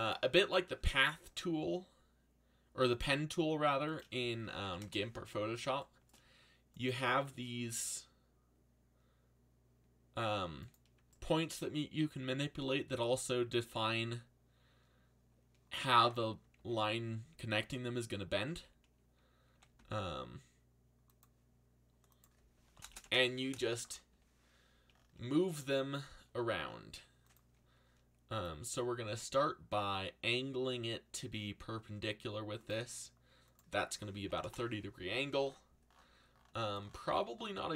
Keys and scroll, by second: 1.2 r, 4.1-5.1 typing, 7.5 g, 16.5 ctrl+z, 18.5-20.3 typing, 22.6 1, 22.9 shift+', 23.0 Return, 29.0 r, 33.9-34.7 typing.